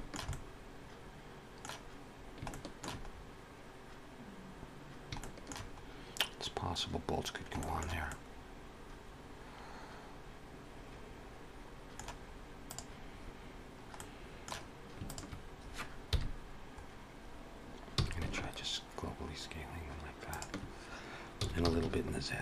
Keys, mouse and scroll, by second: 0.1 middle click, 2.0 scroll down 1, 2.3 shift+middle click, 2.9 scroll up 2, 4.6-5.0 scroll down 1, 5.0 shift+middle click, 5.6 scroll up 1, 6.8-7.4 scroll down 1, 7.4 shift+middle click, 7.9 middle click, 12.7 click, 13.8 middle click, 14.9 shift+click, 15.9 KP_1, 17.9 s, 21.2 s.